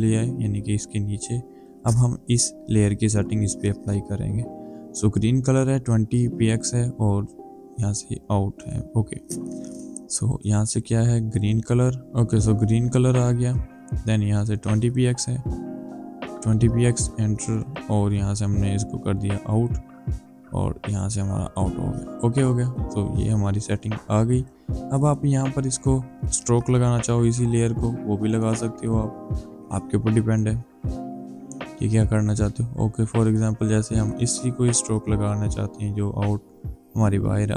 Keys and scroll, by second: 15.7 BackSpace, 16.5 KP_2, 16.8 Return, 23.3 Delete.